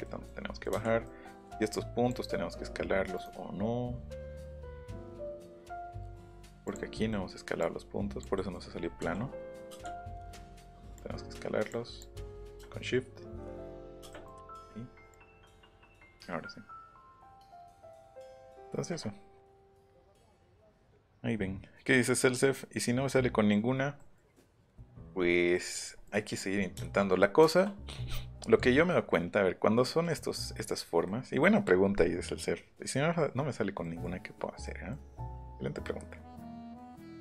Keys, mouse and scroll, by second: 0.2 middle click, 0.3 scroll down 1, 0.3 middle click, 1.0 middle click, 1.4 right click, 3.1 right click, 3.9-4.3 scroll down 2, 5.0-5.4 scroll down 2, 5.8 click, 6.6 click, 7.6 click, 8.3 middle click, 9.0 s, 10.9 click, 12.0-13.6 drag, 14.3 Escape, 14.5 click, 15.1 click, 29.8 scroll up 1, 31.0-31.3 scroll up 1, 33.8 middle click, 34.6 middle click, 35.4-35.7 scroll up 1, 36.4 scroll down 1, 36.7 middle click.